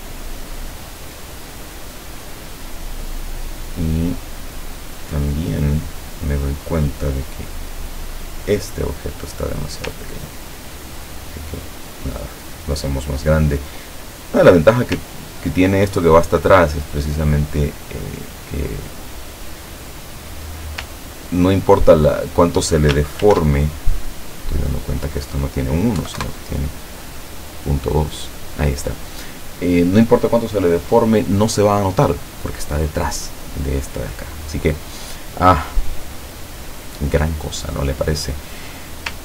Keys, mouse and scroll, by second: 0.2 ctrl+scroll down 2, 7.9 click, 10.0-13.4 ctrl+drag, 15.1-15.7 ctrl+scroll up 1, 17.1 click, 18.0 click, 18.7 click, 19.2 click, 21.2-21.6 ctrl+scroll down 1, 23.3 ctrl+shift+f, 24.8 click, 26.1 KP_1, 26.2 KP_Enter, 28.2 click.